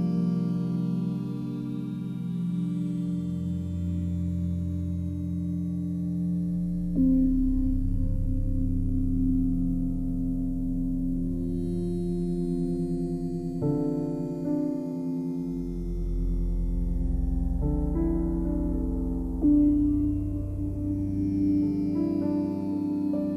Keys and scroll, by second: 0.3 ctrl+t.